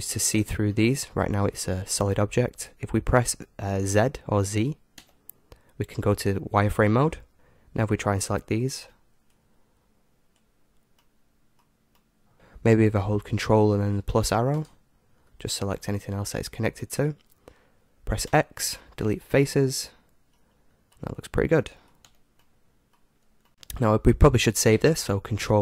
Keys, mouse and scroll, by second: 0.7-2.5 middle drag, 2.5-4.9 scroll up 1, 4.9 z, 7.3 KP_1, 7.9 middle click, 8.7-9.6 scroll up 1, 8.7 b, 9.6 scroll up 1, 11.0-12.3 middle drag, 14.6 ctrl+KP_Add, 18.3 x, 20.3-24.0 middle drag, 22.1 z, 23.5 Tab.